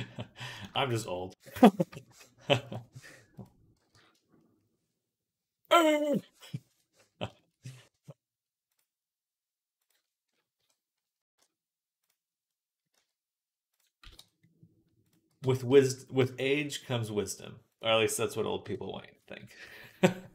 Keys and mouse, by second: 1.4 g, 3.6 g, 6.7-15.9 drag, 10.4 KP_3, 11.1 e, 12.8 z, 13.8 x, 15.1 x, 15.5 z, 16.5-18.2 drag, 17.5 middle click, 18.4 KP_3, 19.5 s.